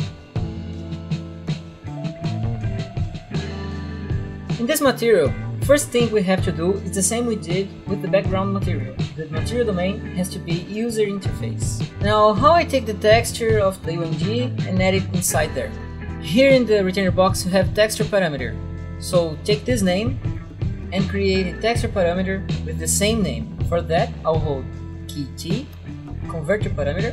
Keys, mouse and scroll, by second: 0.5 click, 0.5 double click, 1.4 click, 1.6 double click, 2.1 double click, 3.1 click, 3.1 right click, 8.3 click, 10.8 click, 14.0 click, 19.6 click, 20.2 ctrl+c, 21.5 click, 25.3 t, 25.7 click, 26.1 right click, 27.0 click.